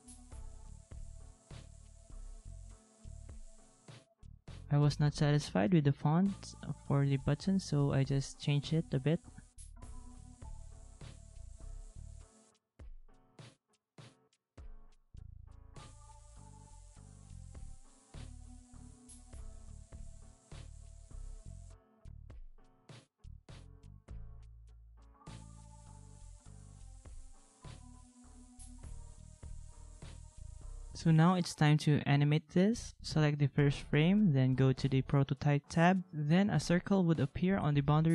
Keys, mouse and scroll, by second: 0.4 ctrl+-, 18.3 ctrl+c, 18.8 ctrl+v, 21.3 ctrl+v, 21.5 ctrl+v, 23.9 ctrl+c, 25.2 ctrl+z, 25.4 ctrl+z, 29.2 ctrl+a, 29.2 ctrl+c, 29.4 ctrl+a, 29.7 ctrl+v, 37.6 ctrl+a.